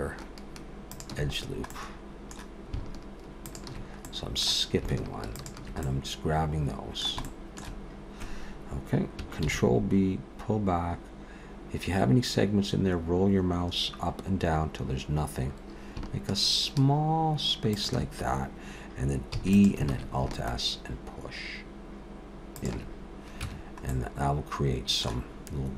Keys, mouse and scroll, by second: 1.4-1.9 scroll down 2, 1.7 middle click, 3.5 alt+shift+click, 4.1 middle click, 5.3 alt+shift+click, 5.8 middle click, 7.3 shift+middle click, 9.5 ctrl+b, 19.4 e, 19.9 alt+s, 23.4 Tab, 23.9 middle click.